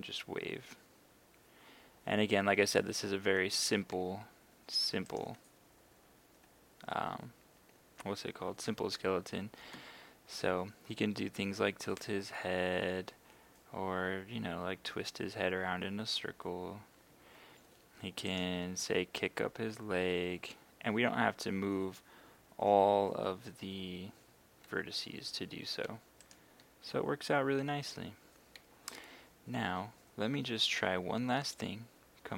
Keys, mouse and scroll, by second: 3.6 Escape, 5.1 right click, 9.7 r, 17.1 Escape, 18.3 right click, 18.8 g, 25.5 Escape, 26.2 right click, 26.6 g, 28.1 Escape.